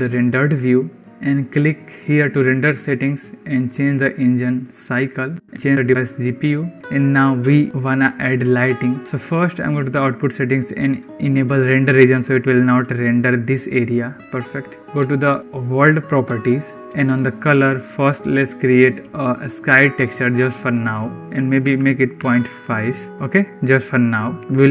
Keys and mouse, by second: 0.7 drag, 3.4-5.0 drag, 5.5 click, 9.8 click, 17.6-19.4 drag, 21.2-22.5 drag.